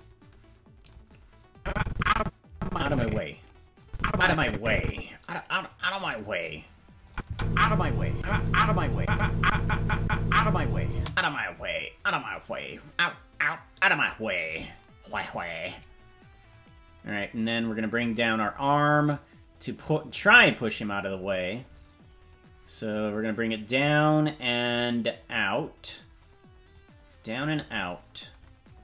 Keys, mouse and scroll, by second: 1.5-3.5 drag, 3.8-4.9 drag, 5.8 right click, 7.1 click, 7.2 space, 8.1 click, 8.9 click, 9.4 click, 9.6 click, 10.0 click, 10.9 space, 12.5-14.1 drag, 16.6 right click, 19.1-20.2 drag, 23.2 click, 25.3 click, 26.7 click.